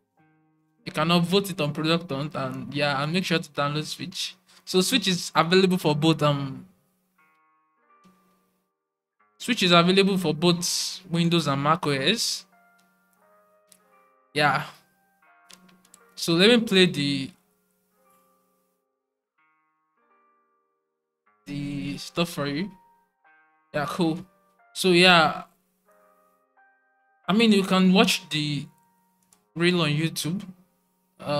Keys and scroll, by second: 23.9 typing.